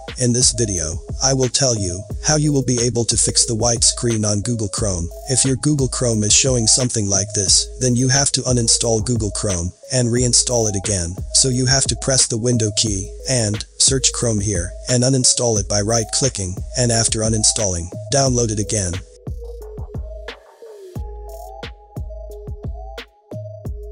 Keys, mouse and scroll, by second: 7.6 click, 7.8 click, 11.8-12.9 typing, 14.4 right click, 15.9 scroll down 1, 16.6 scroll down 1, 17.3 click, 18.2-19.1 scroll down 2, 21.8 click.